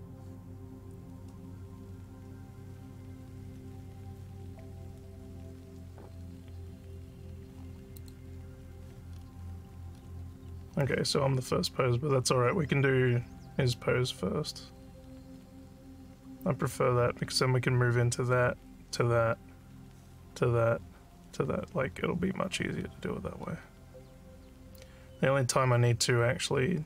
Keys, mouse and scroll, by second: 9.1 scroll.